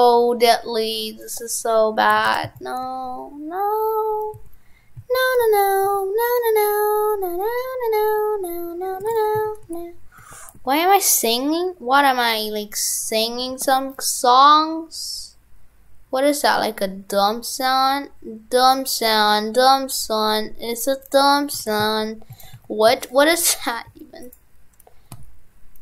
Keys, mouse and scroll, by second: 2.2 shift+f, 9.1 shift+f, 21.7 shift+f.